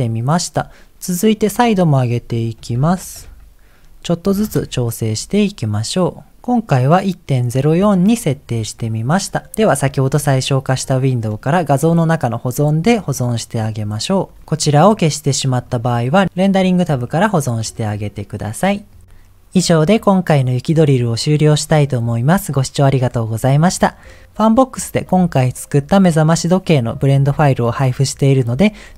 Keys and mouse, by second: 1.3-4.5 drag, 16.4 click, 17.9-19.0 drag.